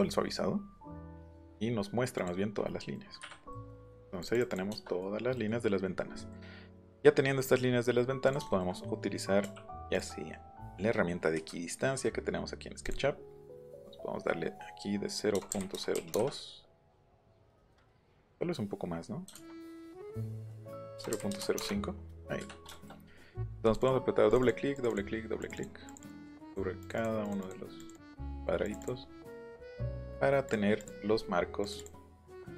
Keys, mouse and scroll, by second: 1.4 click, 2.1 click, 2.8-4.0 middle drag, 4.2 click, 4.3 middle click, 4.5 middle click, 4.7 shift+middle click, 5.3 middle click, 6.2 middle click, 6.8 middle click, 7.7-8.2 scroll up 2, 8.2 click, 8.6 BackSpace, 8.7 scroll up 2, 9.6 scroll up 2, 9.9 click, 12.9 click, 15.3 KP_0, 15.5 KP_Decimal, 15.7 KP_0, 15.9 KP_2, 16.1 KP_Enter, 18.1 scroll up 1, 19.3 ctrl+z, 20.0 click, 21.0 KP_0, 21.1 KP_Decimal, 21.3 KP_0, 21.4 KP_5, 21.6 Return, 23.6 click, 24.3 click, 24.8 click, 25.4 click, 25.5 click, 25.9 click, 26.0 click, 26.3 click, 26.5 click, 27.0 click, 27.8 click, 28.2 click, 28.6 click, 29.2 middle click, 29.4 click, 29.9 click, 30.5 click, 31.1 middle click, 31.6 click, 31.8 click, 32.2 middle click, 32.3 middle click.